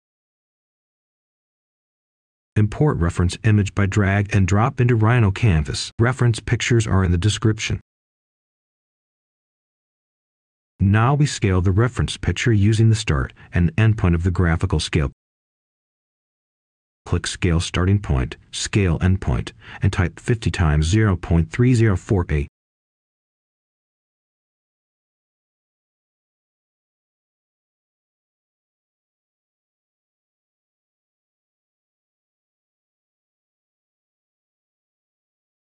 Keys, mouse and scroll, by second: 0.7-3.9 drag, 6.9-7.9 scroll down 1, 7.9-9.9 drag, 11.4-11.8 scroll up 1, 11.8-12.9 drag, 12.4-13.4 typing, 13.8 Return, 15.1-17.3 scroll up 1, 17.3 click, 17.6 scroll down 1, 18.8-19.8 shift+scroll up 2, 19.8 Tab, 21.2 click, 25.2 typing, 27.4 0, 30.8 Return, 32.0-32.5 scroll down 1, 32.5 right click, 33.8 scroll down 1, 34.1-35.3 scroll up 1, 35.3 click.